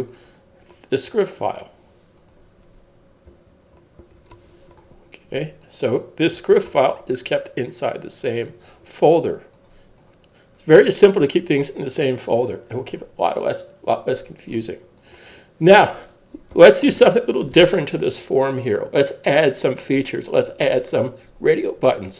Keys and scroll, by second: 3.3 super+s, 6.6 shift+super+s, 16.5 super+s.